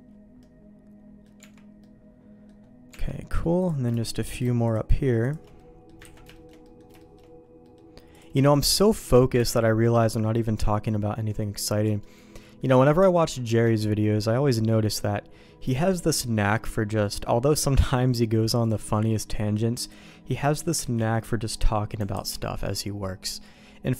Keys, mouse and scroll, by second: 0.4 middle click, 1.4 Tab, 1.8 middle click, 2.9 Tab, 3.6 click, 4.2 click, 4.6 shift+click, 5.6 middle click, 6.0 ctrl+x, 6.3 shift+middle click, 6.6 middle click, 7.0 shift+middle click, 7.6 middle click, 8.1 click, 8.5 shift+click, 9.4 ctrl+x, 10.0 middle click, 10.9 middle click, 11.8 middle click, 12.4 middle click, 13.0 Tab, 13.4 Tab, 13.7 middle click, 15.8 shift+middle click, 16.4-17.5 middle drag, 18.6 click, 18.9 middle click, 20.8 ctrl+t, 22.1 alt+j, 23.0 middle click, 23.7 middle click.